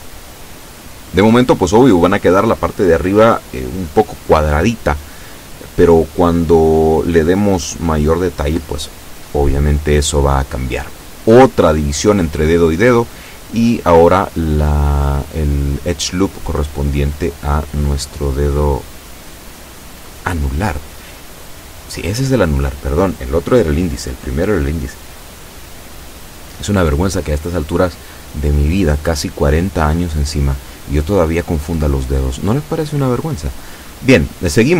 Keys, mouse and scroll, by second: 5.5 ctrl+r, 5.9 ctrl+click, 7.9 click, 9.7-10.8 shift+middle drag, 11.3 ctrl+r, 11.9 ctrl+click, 14.7 click, 15.5 a, 15.8 b, 16.5 click, 17.6-19.4 drag, 21.4 b, 22.1 click, 23.3 b, 24.1 click, 25.8 e, 27.5 click, 28.7-30.4 drag, 30.9-31.9 drag, 32.4 a, 32.7 b, 33.2 click, 34.2-34.7 drag.